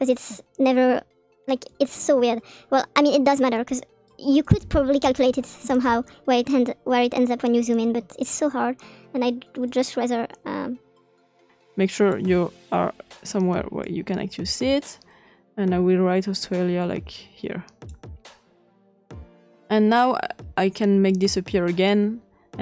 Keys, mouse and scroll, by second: 0.9-2.0 drag, 2.7-4.1 drag, 4.4 click, 5.2 click, 5.9 ctrl+c, 6.2 ctrl+v, 6.6 click, 7.5 click, 8.5 click, 9.8-11.5 drag, 11.9 click, 13.8-17.9 drag, 19.7-20.7 scroll down 2, 21.1-22.1 drag.